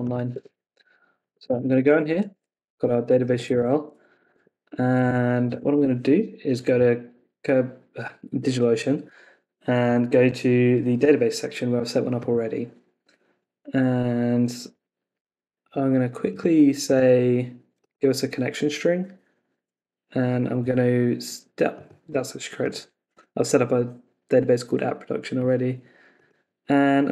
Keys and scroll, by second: 0.3 Escape, 1.4 Escape, 1.9 super+v, 3.5 Left, 4.3 super+Tab.